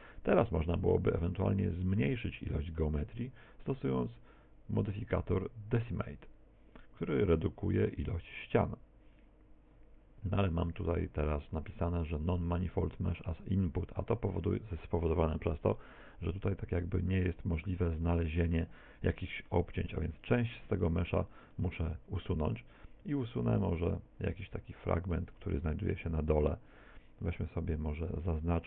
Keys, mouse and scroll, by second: 0.6 Tab, 1.8 middle click, 3.5 middle click, 5.0 click, 16.4 middle click, 17.8 middle click, 18.7 middle click, 20.8 Tab, 22.1 shift+middle click, 23.4 middle click, 25.9 z.